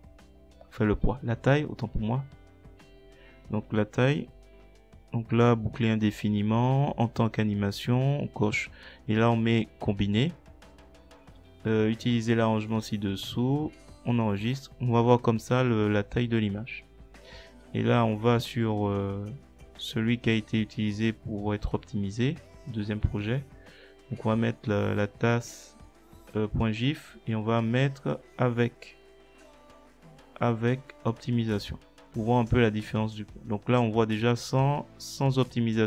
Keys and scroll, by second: 0.3 ctrl+c, 24.2 ctrl+v, 26.2-27.3 typing, 27.6 Left, 30.6 Caps_Lock, 30.8-32.4 typing.